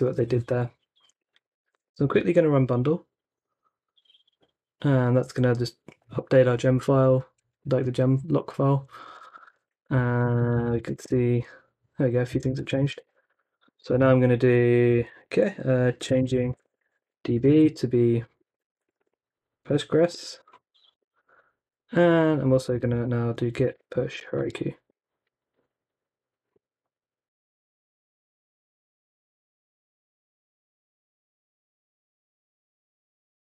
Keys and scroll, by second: 0.9-2.4 typing, 8.8-14.3 typing, 15.7-21.1 typing, 22.2-24.9 typing, 26.6-27.4 typing.